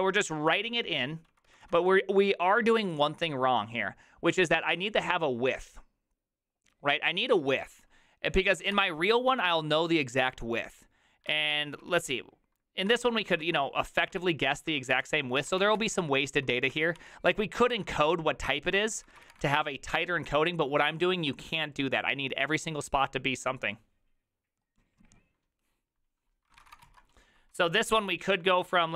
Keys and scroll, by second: 0.0-1.8 typing, 8.4-9.2 typing, 11.2-11.9 typing, 13.0 ctrl+^, 13.9 ctrl+^, 14.2 ctrl+t, 14.7 ctrl+n, 15.0 ctrl+t, 15.2-16.9 typing, 17.0 ctrl+d, 17.3 ctrl+d, 17.7 ctrl+d, 18.9-19.7 typing, 26.6 ctrl+c, 26.6 ctrl+:, 26.7-27.5 typing, 26.7 Return, 26.8 ctrl+u, 28.5-28.9 typing.